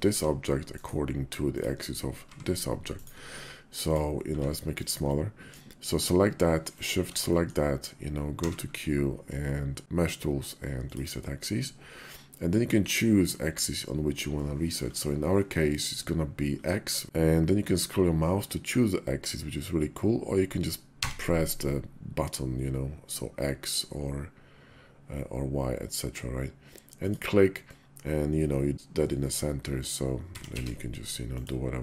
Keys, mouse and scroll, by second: 1.2 click, 2.0 g, 4.1 s, 4.9-5.3 drag, 6.4 shift+click, 7.1 middle click, 8.1 q, 14.2-26.9 middle drag, 27.4-28.7 middle drag, 28.8-29.2 middle drag, 30.0 s.